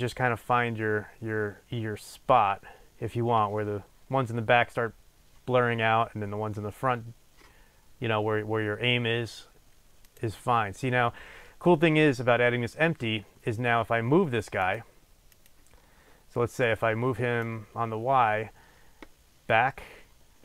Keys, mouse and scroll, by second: 10.1 click, 13.8-14.7 scroll up 2, 14.7 click, 15.5 click, 15.8-16.4 scroll up 2, 17.5-20.4 drag.